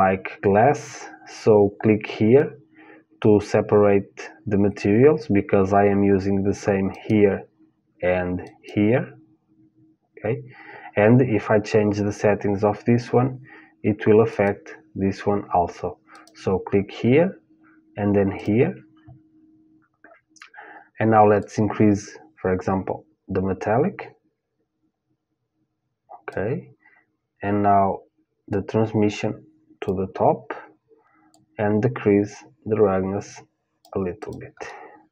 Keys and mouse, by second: 6.7-20.1 drag, 19.6-21.6 middle drag, 21.0-23.0 drag, 28.1-30.1 drag, 30.9-32.9 drag, 33.8-35.1 drag, 34.2 middle click.